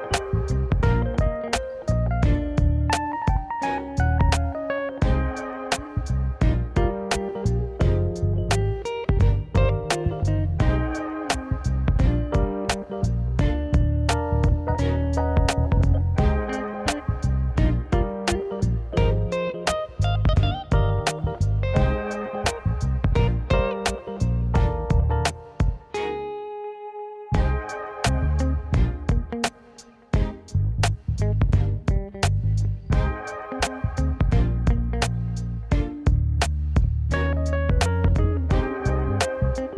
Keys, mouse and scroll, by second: 0.4 click, 0.8 click, 3.7 click, 4.1-4.7 drag, 8.0-8.9 scroll down 2, 8.9 click, 11.1-12.4 scroll up 2, 12.5 click, 13.1-13.8 drag, 20.0 click, 21.1 click, 21.7 click, 27.1 click, 28.7 click, 36.3-36.7 scroll up 1, 36.7 click, 37.1 click, 38.2 click.